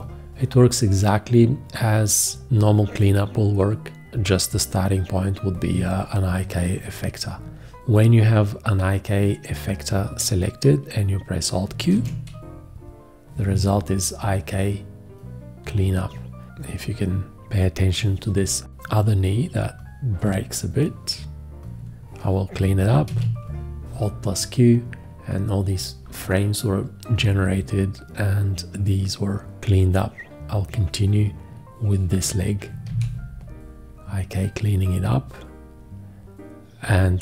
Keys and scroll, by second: 11.9 alt+q, 23.1 alt+q, 32.9 alt+q.